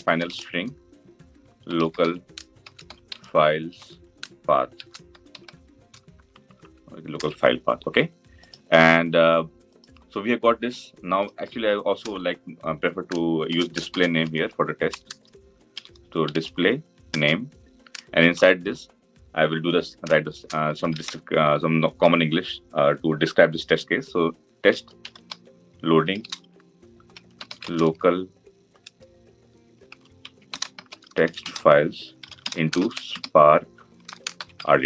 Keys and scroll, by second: 17.0 Return.